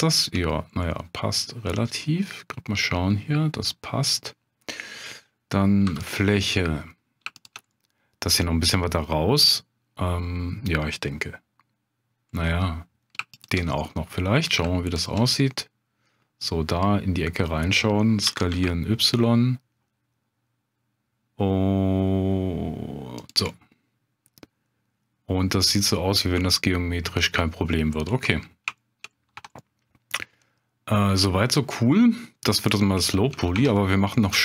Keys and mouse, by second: 0.0 shift+click, 0.8-4.3 middle drag, 5.8 3, 6.4 middle click, 7.3 shift+click, 7.7 middle click, 12.3 middle click, 13.4 shift+click, 13.8 middle click, 14.9 shift+click, 15.4-16.8 middle drag, 18.3 s, 18.5 y, 23.2 click, 23.5-27.6 middle drag, 28.8 shift+click, 29.3 Tab, 29.6-32.6 middle drag, 33.0 shift+middle drag, 33.5 Tab.